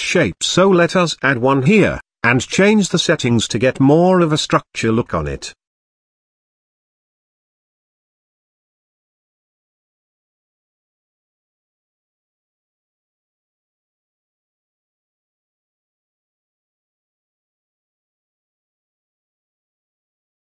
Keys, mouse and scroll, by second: 1.2 KP_Decimal, 2.5-8.8 drag, 9.2-11.2 drag, 11.2-13.5 middle drag, 13.5 click, 14.1 KP_1, 15.1 g, 17.9-20.4 middle drag.